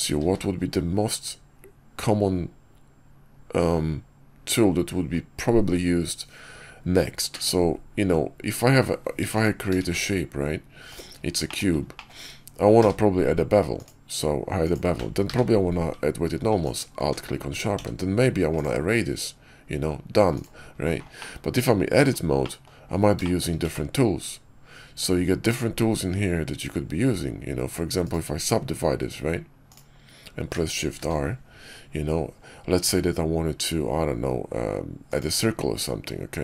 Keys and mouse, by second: 0.1 q, 9.1 x, 9.7 shift+a, 11.3 shift+click, 11.9 click, 12.7 q, 15.2 q, 17.6 q, 21.1 middle click, 21.4 Tab, 22.3 click, 23.1 shift+middle click, 23.5 q, 28.0-29.6 drag, 30.9 shift+r, 32.7 q.